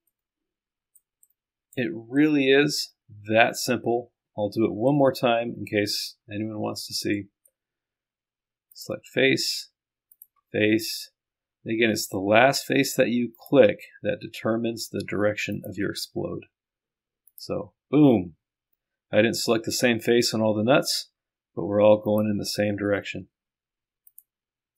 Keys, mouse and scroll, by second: 0.2 click, 8.8 click, 10.2 ctrl+click, 10.5-12.3 scroll down 1, 12.3-13.1 scroll up 1, 13.4 ctrl+click, 15.6 ctrl+click, 17.3 click, 22.0 scroll up 2, 22.1 click, 22.6-23.1 scroll down 2, 23.1 scroll down 1, 24.1 ctrl+click.